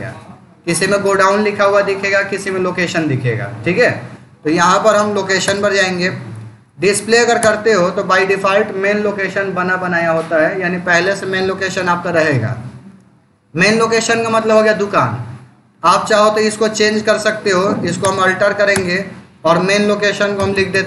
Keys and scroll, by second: 5.3 Return, 6.5 Down, 7.3 Return, 16.8 Escape, 17.3 Down, 17.9 Return, 20.2 s.